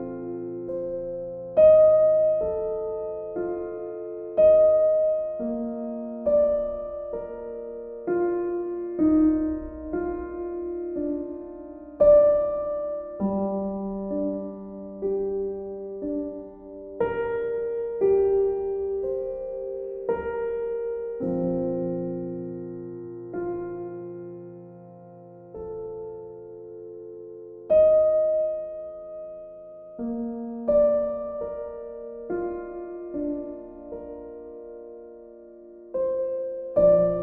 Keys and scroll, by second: 8.1 b.